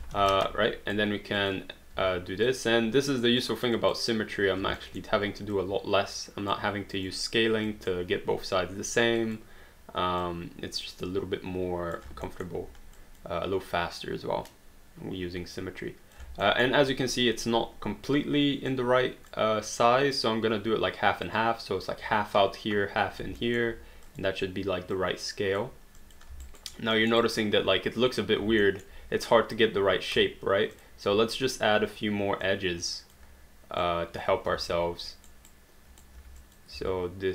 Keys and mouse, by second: 0.1 q, 0.3 right click, 2.0 w, 2.5 click, 3.7 click, 4.9 alt+middle click, 5.5 click, 6.9 click, 9.2 click, 10.2 click, 12.3 alt+middle click, 12.9 click, 16.4 alt+middle click, 18.7 click, 20.2 click, 21.4 click, 23.4 alt+middle click, 24.1 click, 26.0 click, 26.4 alt+right click, 27.0 alt+middle click, 27.2 alt+right click, 28.7 alt+middle click, 30.7 click, 32.4 click, 33.8 click, 34.5 q, 34.7 right click, 36.2 q, 36.4 click, 36.7 w.